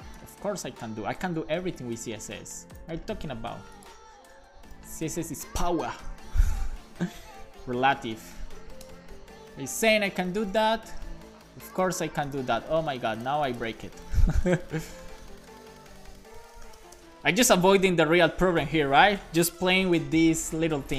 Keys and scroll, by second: 0.2 Return, 1.0 Return, 1.3 super+s, 1.5 Right, 2.5 shift+super+Left, 2.8 super+c, 4.7 super+v, 5.8 Left, 7.5-10.6 typing, 9.7 super+s, 11.1 super+s, 14.4-17.6 typing, 18.3 super+s, 19.6 alt+shift+f, 20.0 super+s.